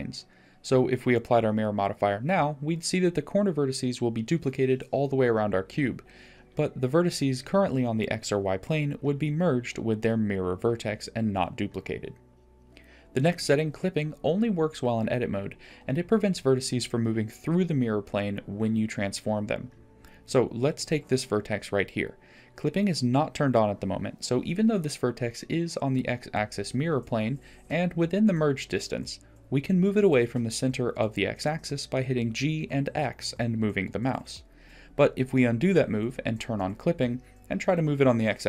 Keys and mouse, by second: 4.0 middle click, 9.3 click, 10.2-12.3 drag, 17.2 middle click, 19.2 middle click, 21.2 middle click, 23.6 g, 30.0 g, 34.5 click, 35.3 g.